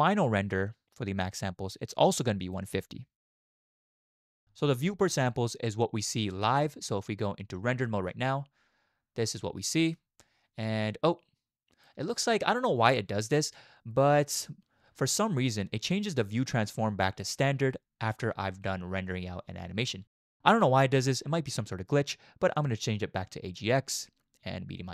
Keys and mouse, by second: 2.5-4.2 drag, 7.5 z, 9.8-10.5 drag, 10.6 click, 10.9 click, 11.1 click, 11.2 click, 11.6 click, 22.6-23.8 drag, 23.8-24.9 middle drag.